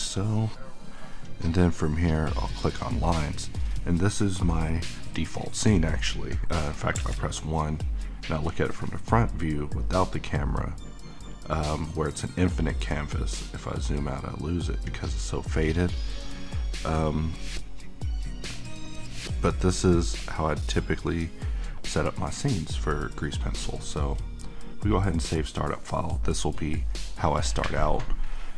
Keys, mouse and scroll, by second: 9.2-9.9 scroll up 1, 9.9-10.6 scroll down 1, 10.6-11.3 scroll up 1, 11.3-11.8 scroll down 2, 12.5-14.0 scroll up 1, 14.0-15.2 scroll down 1, 16.8 click, 23.5 click.